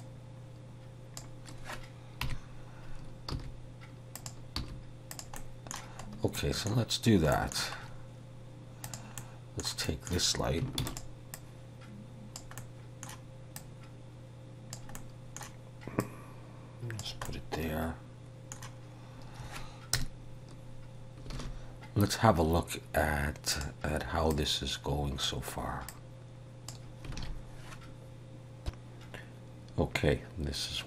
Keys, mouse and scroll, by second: 0.0 click, 2.3 KP_3, 3.4 r, 4.6 g, 5.4 middle click, 6.4 middle click, 7.4 middle click, 7.8 scroll up 2, 8.9 click, 9.2 middle click, 9.9 middle click, 10.9 shift+d, 11.4 click, 12.6 middle click, 13.6 click, 15.0 middle click, 16.0 click, 17.3 middle click, 20.0 KP_0, 21.4 alt+a, 23.6 click, 24.3 click, 25.9 click, 27.3 alt+a.